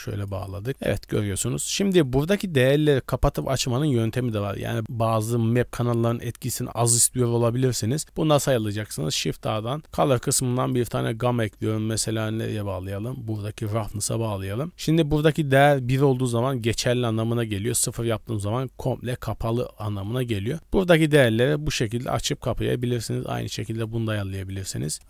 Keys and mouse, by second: 0.7 middle click, 1.2 shift+middle click, 2.1 click, 3.2 click, 4.0 b, 4.6 g, 6.5 click, 7.3 click, 9.0 shift+a, 15.4-17.7 drag, 20.1-22.0 shift+drag, 22.3 click, 22.7 click, 23.1 click, 23.4 shift+d.